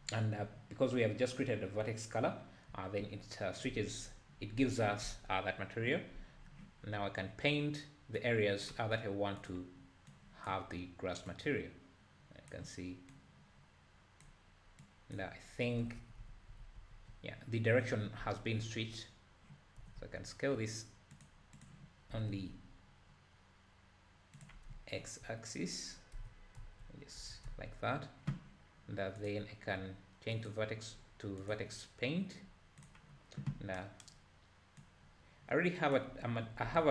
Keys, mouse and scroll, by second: 2.7 `, 8.2-10.1 drag, 11.3-16.2 drag, 16.2 ctrl+z, 16.4 ctrl+z, 16.7 ctrl+z, 17.0 ctrl+z, 21.7 click, 22.2 s, 24.7 `, 26.2 `, 26.6 Tab, 27.2 Tab, 27.5 `, 30.6-33.8 drag, 34.8-36.9 drag.